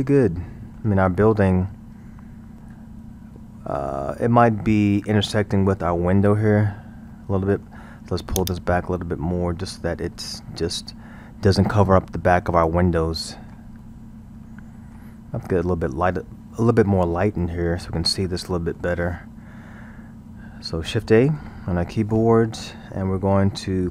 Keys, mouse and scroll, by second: 3.9-4.8 scroll, 4.8-8.4 middle drag, 8.4-11.4 drag, 13.0-16.5 middle drag, 16.5 scroll, 17.1-20.0 middle drag, 20.0-21.3 scroll, 21.3 shift+a.